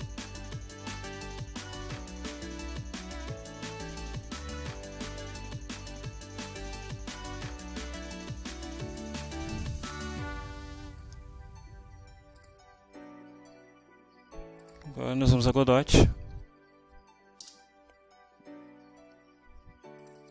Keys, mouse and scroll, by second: 3.4 click, 4.2 click, 8.1 click, 12.4-14.9 drag, 15.8 o, 16.7 Down, 17.5 Return, 20.0 click.